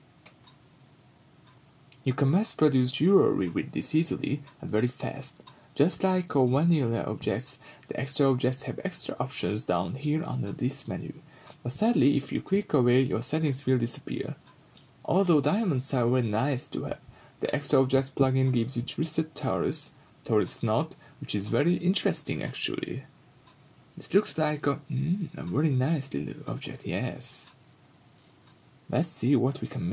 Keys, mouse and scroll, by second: 0.3 scroll up 1, 1.1-1.8 middle drag, 1.6 scroll up 2, 1.8 click, 2.0-6.0 middle drag, 2.8-3.1 scroll down 2, 3.1 x, 3.4 shift+a, 6.0 click, 7.4-16.3 drag, 16.2 scroll down 2, 16.3-24.1 middle drag, 16.8-17.8 scroll up 4, 17.2 x, 17.8 shift+a, 23.3-24.1 scroll up 2, 24.1-25.9 drag, 28.3-29.9 drag.